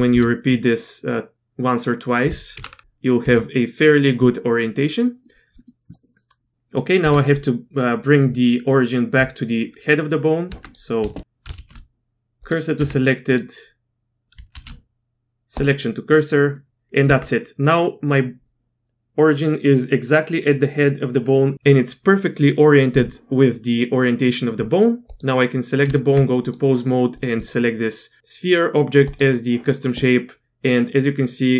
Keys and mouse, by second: 0.1 KP_3, 1.3 r, 2.5 KP_7, 3.2 r, 4.2-4.7 middle drag, 5.0 middle click, 5.6 middle click, 7.0 Tab, 7.3 click, 10.5 Tab, 11.1 shift+s, 11.5 shift+s, 12.8 Tab, 14.5 shift+s, 16.1 click, 17.0 Tab, 25.8 Tab, 26.4 click, 27.2 click, 27.5-29.2 drag, 30.1-31.5 middle drag.